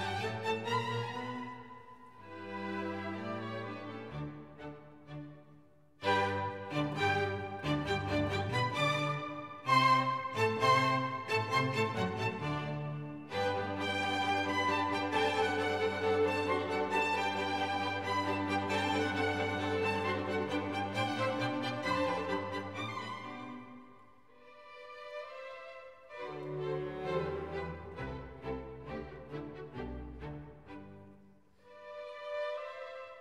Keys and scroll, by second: 0.9 F1, 4.4 Escape, 11.0 F1, 14.7 Escape, 26.1 F1, 30.5 Escape.